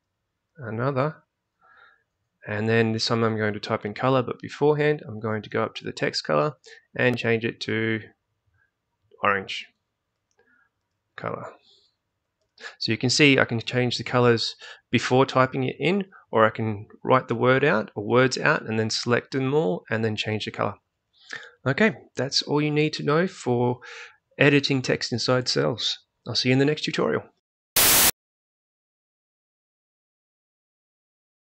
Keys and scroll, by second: 0.0-1.6 typing, 10.6-12.7 typing.